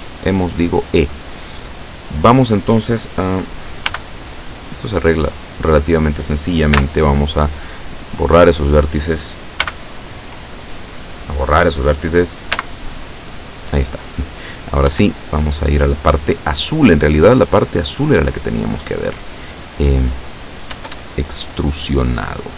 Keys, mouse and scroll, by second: 0.2-2.5 drag, 3.9 b, 4.4-5.8 drag, 6.8 x, 7.9 click, 9.7 b, 10.4 click, 12.6 x, 13.1 click, 14.9 Tab, 15.3 right click, 16.6-17.7 middle drag, 17.9-20.5 middle drag, 20.8 Tab, 21.3-22.5 middle drag.